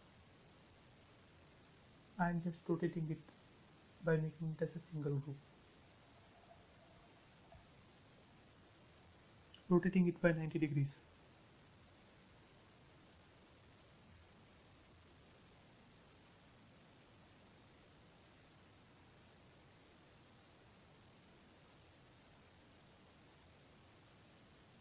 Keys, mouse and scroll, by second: 1.1 right click, 2.3 click, 3.0 space, 3.4 click, 4.3 q, 5.1 Left, 6.5 click, 11.7-12.5 typing, 12.2 Return, 12.9 scroll up 1, 13.5 middle click, 14.6 middle click, 15.7-16.9 scroll up 1, 16.9 q, 17.8 click, 19.6-20.9 typing, 20.5 Return, 21.1 middle click, 21.6 scroll down 1, 22.8 shift+middle click, 23.1 middle click, 24.0 scroll up 1.